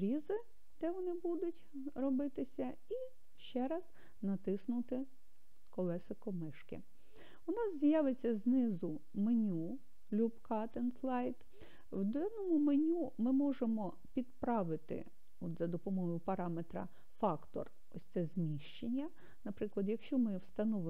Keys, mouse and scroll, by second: 3.1-4.3 drag, 8.4 click, 19.8-20.8 drag.